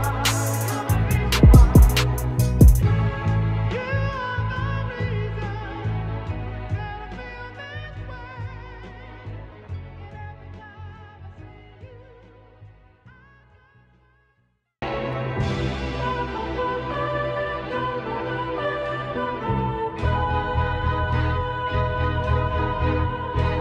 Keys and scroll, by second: 0.4 ctrl+0, 0.8 ctrl+-, 3.9 ctrl+c, 8.5 ctrl+v, 10.9-12.1 typing, 13.1 ctrl+shift+z, 14.6 ctrl+shift+z, 15.1 [, 15.3 [, 16.7 ctrl+shift+z, 18.4 ctrl+shift+z.